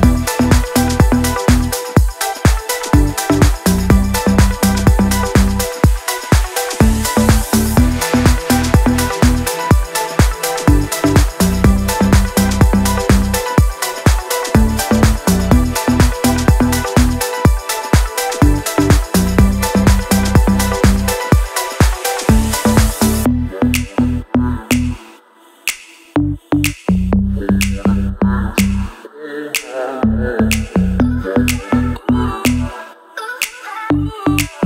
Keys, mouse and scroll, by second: 0.8-4.5 typing, 6.3 Return, 6.5-9.7 typing, 10.8 click, 13.6 click, 15.3-19.8 shift+drag, 19.8 shift+click, 23.2-23.9 scroll down 1, 26.6 click, 27.4-29.8 shift+drag, 32.3 c, 32.5 click.